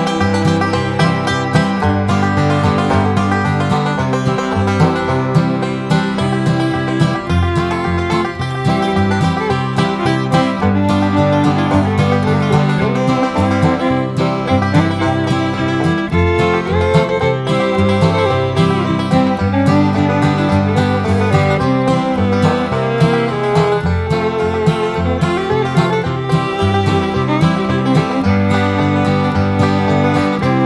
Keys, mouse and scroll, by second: 1.8 click, 2.5 Escape, 2.9 click, 3.9 click, 4.5 Delete, 7.5 click, 8.7 click, 9.6 scroll down 1, 10.5 right click, 12.1 click, 13.3 click, 14.7 click, 15.2 click, 16.9 click, 19.3 click, 20.5 click, 21.9 click, 22.4 Escape, 22.8 click, 24.1 click, 25.1 Delete, 25.7-26.2 scroll down 1, 26.7-27.1 scroll up 1, 27.5 scroll down 2, 28.4 click, 30.5 click.